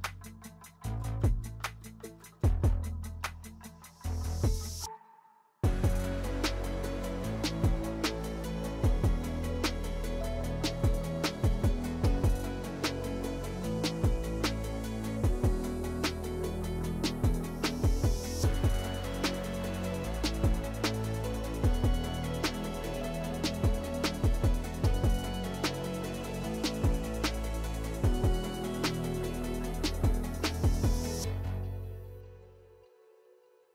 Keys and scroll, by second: 0.3 3, 0.9 s, 1.1 s, 7.0 s, 9.3 s, 11.3 s, 13.9 s, 17.2 s, 19.4 s, 21.0 s, 23.3 2, 26.3 ctrl+shift+z, 26.8 2, 30.8 s, 31.4 alt+e, 33.5 s.